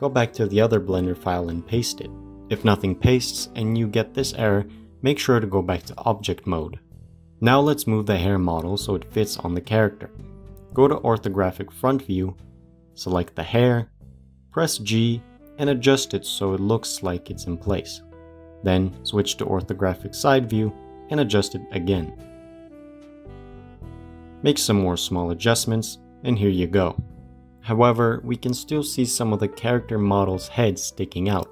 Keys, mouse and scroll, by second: 1.5 ctrl+v, 2.2 Left, 3.1 ctrl+v, 5.9-7.1 drag, 11.9 KP_1, 13.5 click, 15.0 g, 18.3-18.7 scroll up 6, 18.7 scroll down 1, 19.5 KP_3, 20.1-20.5 scroll down 4, 21.6 g, 26.1 click, 29.1-31.2 shift+middle drag, 31.2 click.